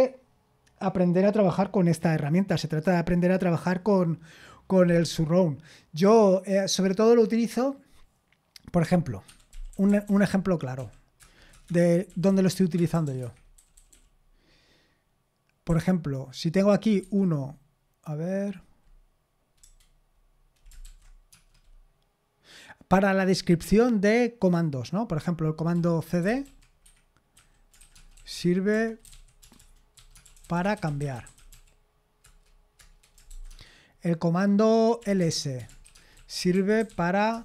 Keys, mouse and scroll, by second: 9.2 Escape, 9.5-10.8 typing, 11.2 Return, 11.3 Return, 11.5 Return, 11.7 Return, 12.0-14.6 typing, 13.2 Escape, 15.6 i, 17.0 1, 19.6 BackSpace, 20.8-21.3 typing, 25.7-33.5 typing, 32.4 Return, 34.7-37.4 typing.